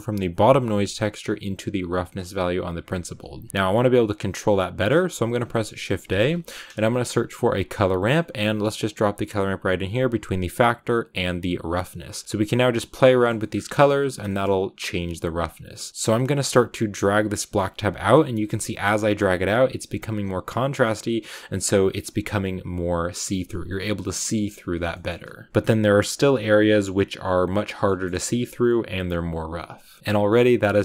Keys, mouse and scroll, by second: 3.5 click, 7.8 shift+a, 11.8-24.8 drag, 16.0 right click, 24.8 shift+middle click, 25.0 scroll down 2, 25.5 scroll up 1, 27.8-30.8 shift+middle drag.